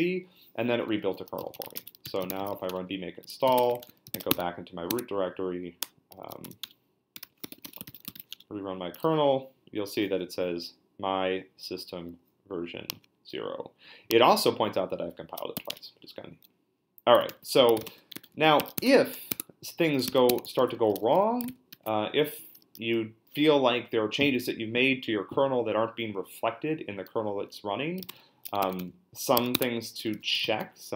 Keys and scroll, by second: 1.1-4.6 typing, 4.9 Tab, 5.8-8.7 typing, 6.6 Return, 15.5 q, 15.7 Return, 17.3 ctrl+l, 17.5-21.7 typing, 19.3 Tab, 21.5 ctrl+c, 27.7-30.9 typing.